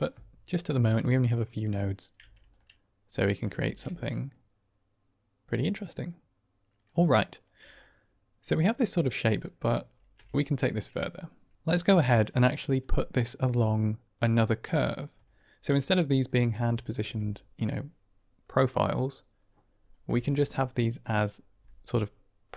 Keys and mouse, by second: 0.7-2.0 middle drag, 2.1 Tab, 2.5-3.5 middle drag, 3.5 shift+space, 4.0 middle click, 4.1-5.9 drag, 5.9-6.7 middle drag, 7.7-8.3 middle drag, 8.3-9.0 drag, 9.2 click, 9.8 ctrl+space, 15.3 shift+click.